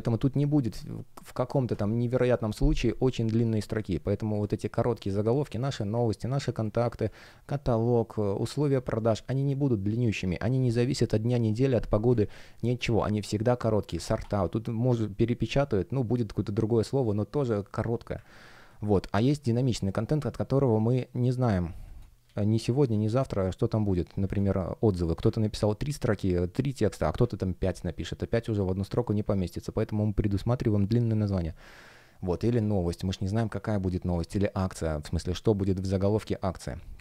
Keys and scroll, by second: 3.9 space, 12.0 space, 18.6 space, 24.3 super+space, 31.0 space, 34.0 space, 36.9 super+w.